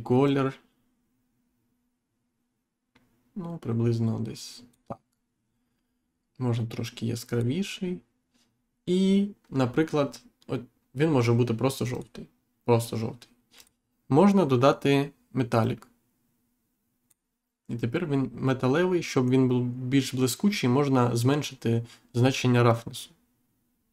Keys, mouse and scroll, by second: 0.2 click, 7.2 click, 11.8 click, 13.5 click, 15.5 click, 22.6 click.